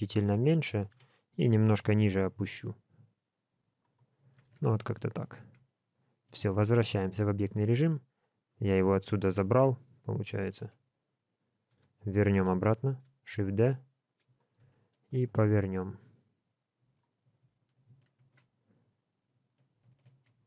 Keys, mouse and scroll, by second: 0.9 KP_1, 1.6 scroll up 1, 2.5-3.9 scroll up 2, 2.5 g, 3.9 scroll down 2, 4.4 alt+a, 4.6 middle click, 5.4 Tab, 6.4 alt+a, 7.1 middle click, 8.5 click, 9.4 Tab, 11.7 l, 12.3 KP_7, 13.3 shift+d, 14.6 r, 20.1 alt+a.